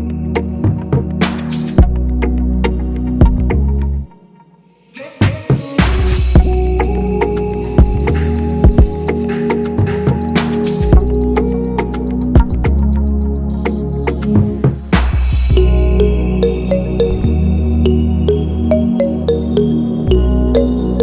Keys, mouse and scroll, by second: 7.7 click, 7.9 click, 9.3 click, 17.2 click, 17.9 drag.